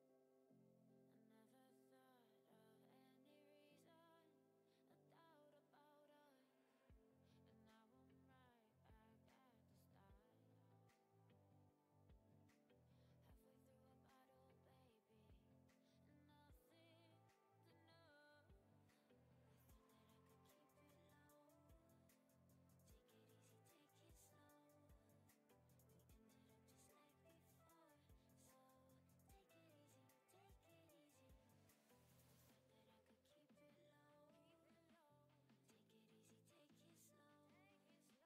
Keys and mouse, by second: 0.1 Tab, 3.6 Tab, 6.9 Tab, 11.5 Tab, 17.5-22.7 right drag, 18.2-22.7 drag.